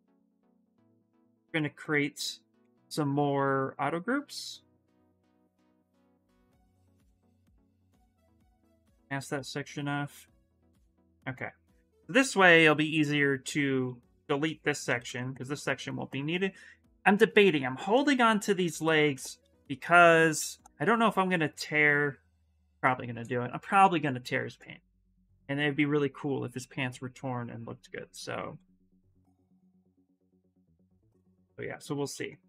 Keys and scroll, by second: 2.3 2, 3.0 2, 8.8 ctrl+w, 22.8 shift+f, 30.9 s.